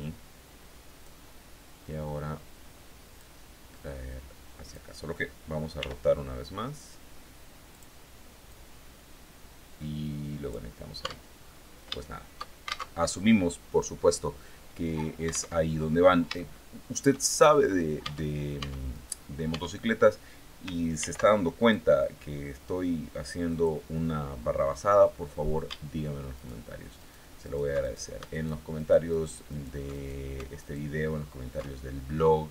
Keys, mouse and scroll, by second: 2.6-4.4 drag, 5.2 r, 7.2 click, 7.9-10.1 drag, 10.5 Tab, 10.8-11.2 scroll down 1, 11.4 shift+middle click, 12.4 alt+shift+Tab, 15.0 alt+Tab, 15.8 shift+click, 16.8 shift+scroll up 2, 17.5 Tab, 18.4 right click, 19.0 Tab, 20.4 ctrl+r, 21.1 ctrl+click, 23.0 click, 23.5-23.9 scroll up 1, 24.1 scroll down 1, 24.5 scroll up 1, 25.8 alt+shift+right click, 26.4 alt+shift+right click, 26.9 alt+shift+right click, 27.3 alt+shift+right click, 27.8 alt+shift+right click, 28.2 alt+shift+right click, 28.9 alt+shift+right click, 29.4 alt+shift+right click, 30.0 alt+shift+right click, 31.1-31.8 scroll up 4.